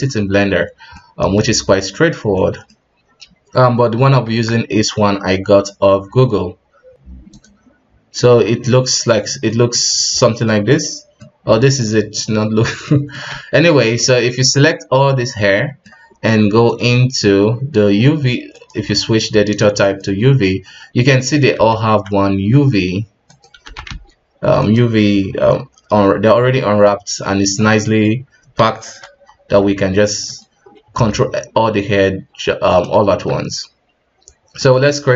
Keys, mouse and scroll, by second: 0.6 scroll down 3, 0.9-4.2 middle drag, 4.2 Tab, 7.4 scroll down 6, 8.6-9.1 scroll up 3, 9.5 middle click, 9.8-10.2 scroll up 1, 10.2 middle click, 10.6-10.9 scroll up 3, 11.2 middle click, 11.7-12.2 scroll down 3, 12.2-12.6 scroll up 1, 12.8-13.3 middle drag, 13.3 a, 14.0-16.7 middle drag, 16.7-20.6 drag, 20.6-21.1 scroll up 1, 21.1 middle click, 21.6 a, 22.4 s, 23.8 s, 26.9 middle click, 27.3-27.8 scroll up 2, 27.8 middle click, 28.4 s, 30.8 r, 33.1 Tab, 34.6-35.1 drag.